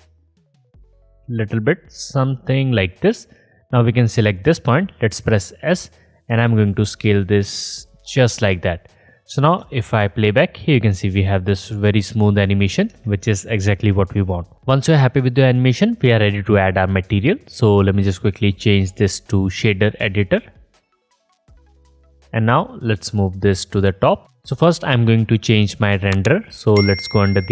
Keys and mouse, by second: 0.7-4.2 drag, 4.2 middle click, 4.5-6.8 drag, 5.1 s, 9.5 space, 12.9 space, 18.2 middle click, 21.2-24.2 middle drag, 24.2-25.5 middle drag.